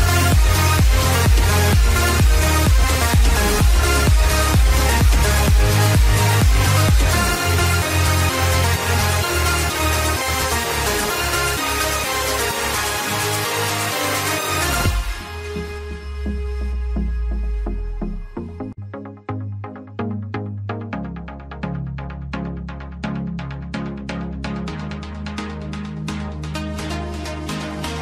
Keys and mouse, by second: 0.0-0.1 typing, 1.6 click, 3.7-7.6 typing, 7.1 click, 10.1 click, 11.8 click, 13.9 click, 15.2 click, 16.7 click, 19.9 click, 21.5 click, 22.6 click, 22.9 click, 22.9 KP_0, 22.9 KP_1, 23.6 Tab, 23.6 click, 23.6 KP_0, 23.6 KP_1, 27.3 KP_6, 27.3 KP_3.